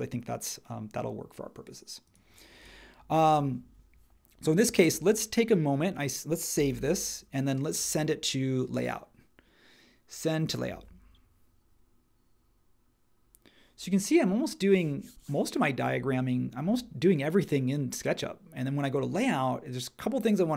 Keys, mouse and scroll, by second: 6.7 super+s.